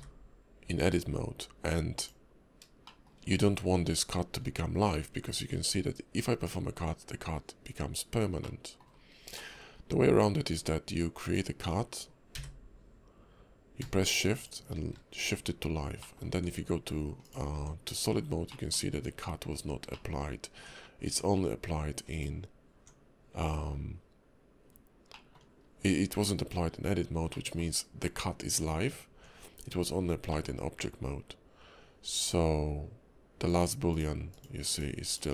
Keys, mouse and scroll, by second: 2.8 shift+middle click, 3.2 scroll up 3, 4.2 scroll down 3, 5.1 scroll up 2, 5.4 Tab, 6.3 Tab, 8.4 middle click, 8.9 scroll down 2, 9.4 shift+middle click, 9.7 scroll up 1, 10.5 click, 15.6-16.0 scroll up 1, 16.0 middle click, 16.3 Tab, 17.2 click, 17.6 Tab, 18.2-18.5 scroll down 2, 18.5 middle click, 19.6-19.9 scroll up 3, 19.9 middle click, 20.3 scroll down 1, 20.5 Tab, 21.1 Tab, 22.1 click, 22.5 Tab, 23.5 Tab, 24.6-25.1 scroll down 2, 25.1 middle click, 25.5 scroll up 2, 26.4 Tab, 27.3 middle click, 29.1 Tab, 29.7-30.3 scroll down 4, 30.3 middle click, 33.5 click, 33.9 click, 34.3 click, 34.7 click, 35.1 click.